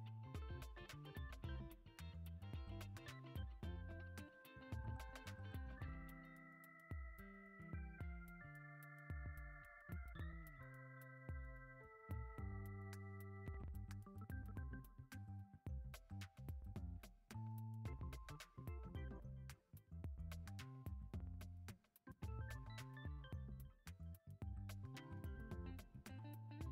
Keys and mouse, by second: 0.3 click, 1.0 e, 2.8 e, 4.5 g, 6.5 s, 7.7 g, 8.9 shift+middle click, 11.2 click, 12.3 alt+z, 12.7-13.2 drag, 13.6-14.3 shift+drag, 14.5 alt+z, 15.1 g, 20.4 alt+z, 20.8-21.6 drag, 21.8 alt+z, 22.3 middle click, 22.8 g, 25.0 ctrl+Tab, 25.3 l, 25.3 g, 25.6 middle click, 25.9 F6.